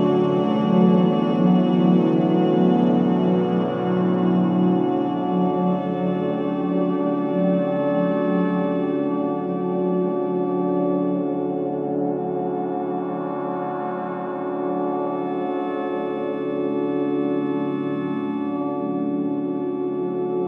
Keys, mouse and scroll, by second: 1.5 scroll up 1, 2.0 scroll down 1, 2.7-6.8 drag, 6.6-8.1 typing, 8.5 Return, 8.9-9.3 scroll up 1, 9.9 click, 11.9 shift+click, 13.2-13.6 scroll up 1, 15.2 scroll down 1, 16.0-17.9 drag, 19.0 scroll up 1.